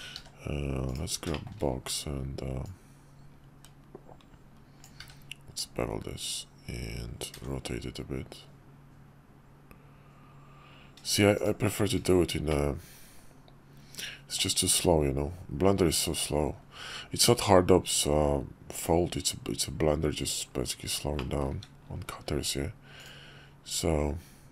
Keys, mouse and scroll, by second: 0.2 d, 1.3 shift+middle click, 2.6-12.5 drag, 13.4-15.1 middle drag, 21.2 middle drag, 23.0 click.